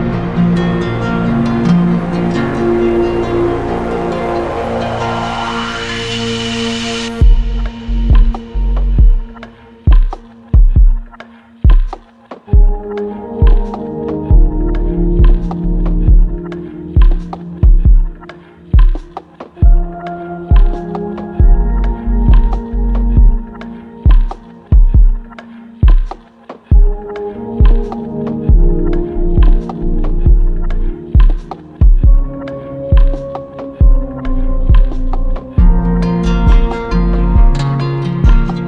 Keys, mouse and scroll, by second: 1.7-5.0 drag, 6.4 right click, 8.7 shift+click, 10.3 click, 10.5 click, 12.0 click, 13.4 click, 14.3 right click, 14.7 click, 16.1 shift+click, 17.0 alt+click, 17.6 alt+click, 18.1 alt+click, 18.6 alt+click, 19.0 alt+click, 23.3 shift+click, 24.0 alt+click, 24.5 alt+click, 25.2 click, 25.7 click, 28.9 shift+click, 29.8 shift+click, 29.8 z, 30.8 click, 32.0 click, 35.9 click, 36.4 click, 36.8 click, 37.3 click, 37.7 click, 38.4 right click.